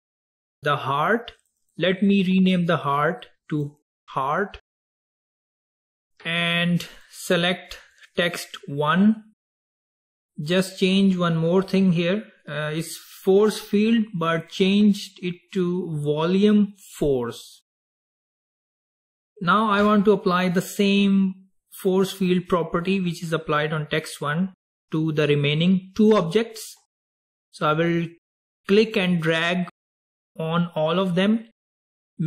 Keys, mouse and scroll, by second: 0.3 click, 1.5 click, 1.8-4.7 drag, 7.0 drag, 8.0 drag, 14.5-17.6 drag, 28.9 drag.